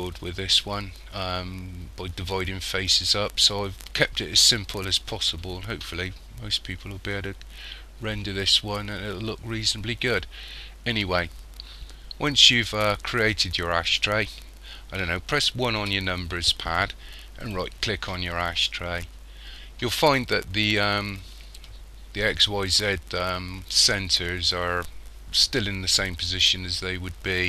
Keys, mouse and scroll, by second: 15.8 KP_1, 17.5 right click.